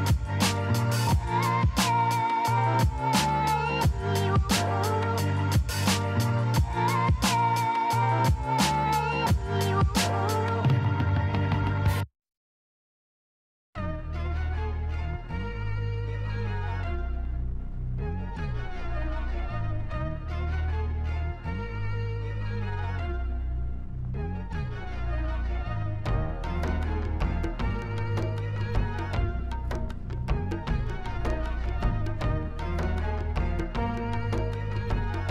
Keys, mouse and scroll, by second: 2.9 click, 4.0 KP_8, 4.4 KP_0, 5.1 Return, 7.9-14.6 drag, 14.9 click, 15.4 click, 16.3 drag, 17.1 KP_8, 17.3 KP_5, 17.5 KP_0, 18.0 Return, 20.7 click, 22.0 KP_8, 22.3 KP_0, 23.3 Return, 28.6 click, 30.1 click, 30.7 click, 31.9 click, 34.9 click.